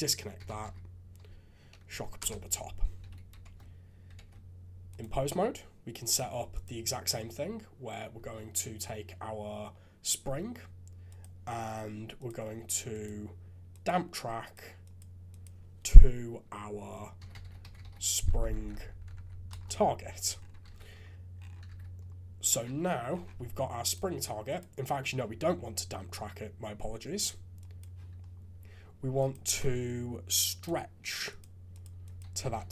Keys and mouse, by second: 3.0 alt+a, 3.4 ctrl+Tab, 4.4 ctrl+Tab, 6.0 click, 6.5 click, 11.1 click, 12.1 click, 13.1-13.8 drag, 14.6 click, 15.4-19.5 drag, 18.5 Down, 18.6 Down, 19.1 Down, 20.6 alt+a, 21.6 shift+z, 22.7 shift+z, 24.5 click, 27.6 click, 29.1-30.6 drag, 31.4 click, 32.1-32.7 drag.